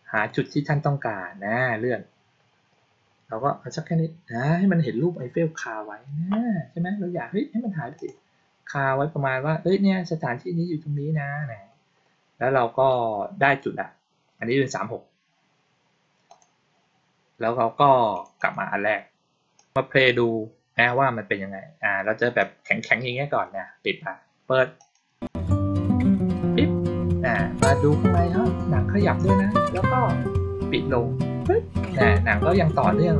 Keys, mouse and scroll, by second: 0.0 click, 1.3-3.2 scroll up 1, 3.2 scroll down 1, 3.5-4.4 scroll up 1, 7.8 click, 8.3 scroll down 1, 8.6-9.2 scroll up 1, 16.1 click, 18.0 click, 18.2 click, 19.4 click, 22.2-22.9 drag, 24.6 click.